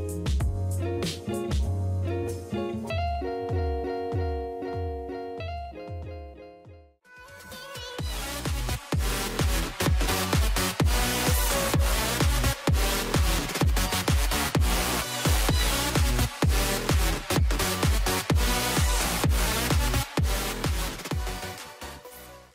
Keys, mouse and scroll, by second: 6.6 space.